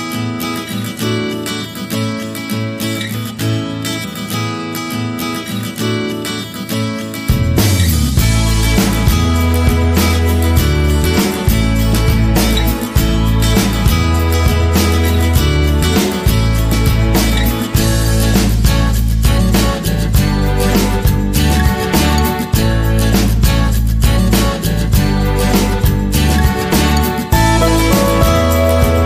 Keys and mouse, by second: 0.4-1.0 middle drag, 1.5 g, 3.0 r, 4.0 g, 5.4 shift+middle click, 5.7 middle click, 6.4 middle click, 7.4 middle click, 7.9 middle click, 8.5 g, 9.6-11.0 middle drag, 12.2 ctrl+l, 13.1 KP_7, 14.6 KP_3, 16.1 shift+d, 18.9 s, 20.0 g, 20.9 shift+middle click, 22.4 shift+d, 23.9 r, 25.0 middle click, 26.4 middle click, 27.2 middle click, 28.0 r, 28.9 r.